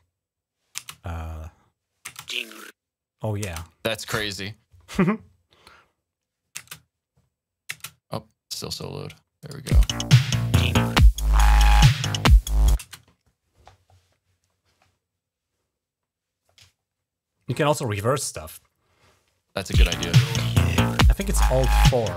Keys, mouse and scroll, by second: 0.6 space, 1.4 click, 5.9 click, 6.6 space, 7.5 space, 8.3 click, 9.3 click, 9.6 typing, 12.7 space, 13.8-16.3 drag, 17.1-18.7 drag, 19.7 space, 22.1 space.